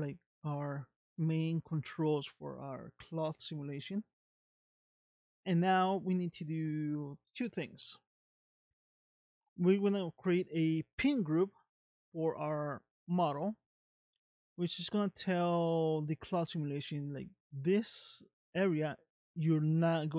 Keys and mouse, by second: 16.0 middle click, 18.2 middle click.